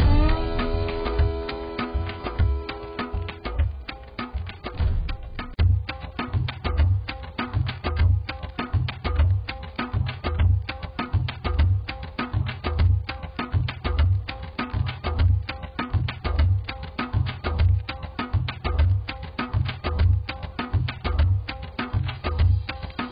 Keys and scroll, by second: 0.8 z.